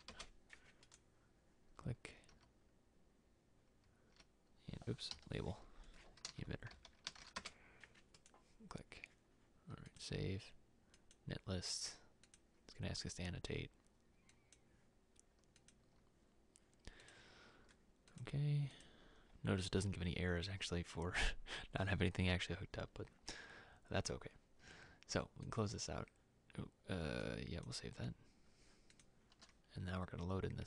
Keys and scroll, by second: 0.0-0.5 typing, 2.4 e, 4.3-7.8 typing.